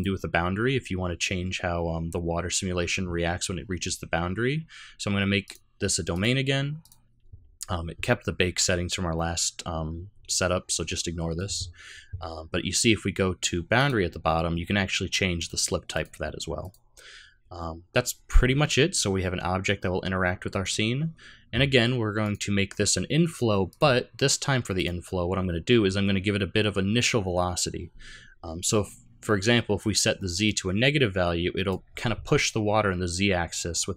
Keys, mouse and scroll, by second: 5.4 click, 6.1 click, 13.7 click, 14.1-15.4 scroll down 7, 15.4 click, 16.6 click, 20.6 click, 22.2 click, 23.7 click, 30.4 click.